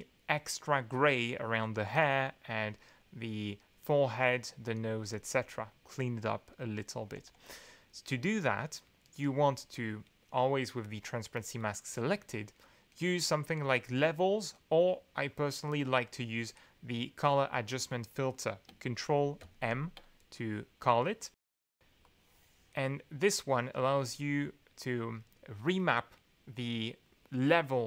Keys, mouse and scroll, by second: 1.7 click, 4.7 click, 7.1 alt+2, 9.0 click, 12.4 middle click, 19.4 ctrl+m, 22.0-23.6 drag, 24.0 drag.